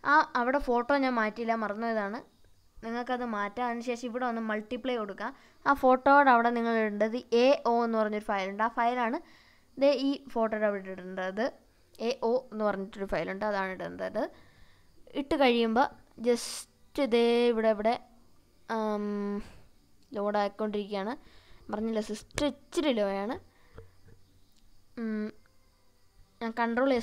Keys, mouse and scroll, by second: 2.0-4.5 drag, 10.5 click, 12.1 click.